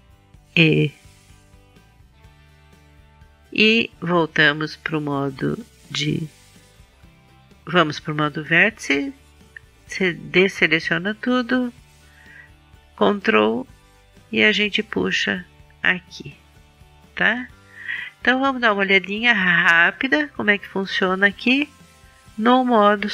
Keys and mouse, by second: 0.4 e, 2.9-4.8 drag, 5.8-7.7 drag, 8.7 a, 12.9-14.9 drag.